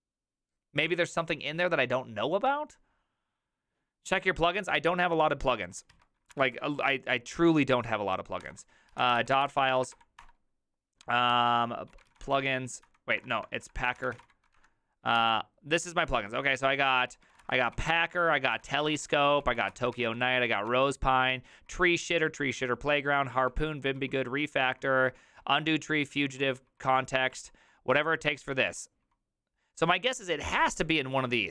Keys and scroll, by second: 6.0 alt+{, 6.4 ctrl+c, 8.4 ctrl+f, 8.7-10.4 typing, 11.3 ctrl+p, 11.7-14.7 typing, 13.2 ctrl+f, 15.2 Return, 15.8-21.7 typing.